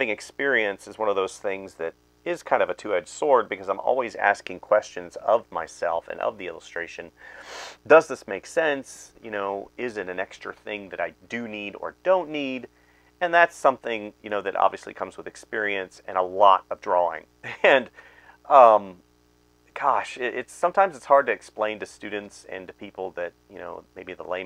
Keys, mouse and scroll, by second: 0.0-0.1 typing, 1.1 space, 2.0 space, 2.4 ctrl+z, 2.7 space, 3.4 space, 5.0 space, 5.2 space, 5.7 space, 6.6 space, 7.1 ctrl+z, 7.3 ctrl+z, 7.6-16.4 typing, 17.7-21.1 typing, 19.3 right click, 22.8 space, 23.5 space, 24.3 space.